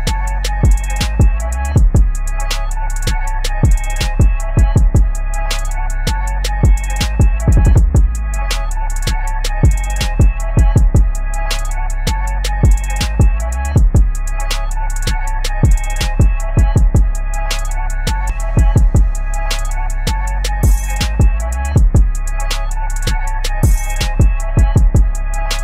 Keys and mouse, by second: 0.3 ctrl+g, 1.3 click, 1.6-4.2 typing, 5.2 ctrl+z, 6.3-9.3 typing, 11.1-13.3 drag, 13.8 ctrl+t, 14.5-19.7 drag, 19.7 shift+Up, 20.1 Down, 22.0 click, 22.6 ctrl+[, 23.5-25.6 drag.